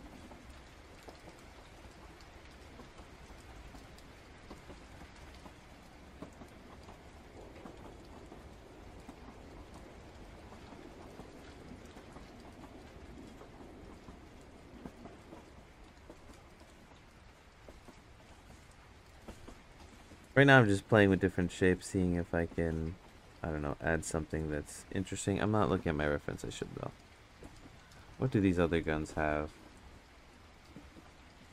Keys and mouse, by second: 0.1 ctrl+z, 0.7 click, 2.8 click, 6.5 click, 7.9 ctrl+z, 8.9 click, 9.6 ctrl+z, 10.0 click, 11.0 ctrl+z, 11.9 click, 13.4 click, 14.3 ctrl+z, 14.6 click, 16.0-17.8 drag, 18.1 ctrl+z, 19.3 click, 20.5 ctrl+z, 20.8 click, 22.1 ctrl+z, 22.4 click, 23.8 click, 24.9 ctrl+z, 25.6 ctrl+z, 25.9 click, 26.5-27.7 drag, 28.5-30.7 drag.